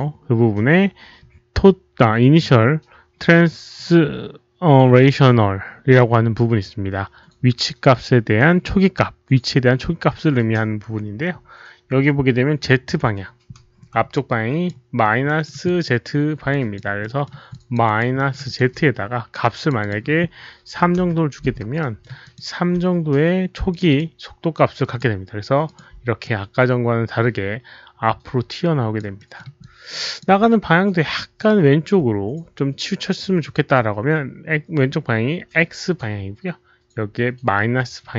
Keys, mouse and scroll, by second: 1.5 click, 14.1-14.6 alt+drag, 15.2 alt+middle click, 15.6 alt+click, 16.4 alt+drag, 16.9 alt+middle click, 17.4 alt+click, 17.8 alt+right click, 18.1 alt+middle click, 18.4 alt+click, 19.5 alt+click, 19.5 alt+middle click, 19.5 alt+right click, 19.7 alt+click, 20.7 KP_3, 21.0 Return, 21.7 alt+middle click, 22.2 alt+click, 23.6 click, 23.8 click, 23.9 Return, 23.9 alt+middle click, 23.9 alt+right click, 23.9 KP_3, 24.7 click, 25.6 click, 26.2-28.9 alt+drag, 29.1 alt+middle click, 29.5 alt+click, 31.7 alt+click, 31.7 alt+middle click, 34.5 alt+click, 34.5 alt+middle click, 35.8 alt+click, 35.8 alt+middle click.